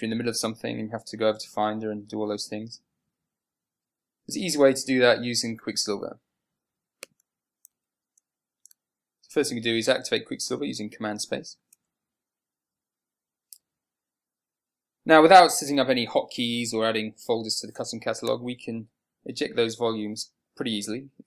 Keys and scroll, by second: 8.2 super+w.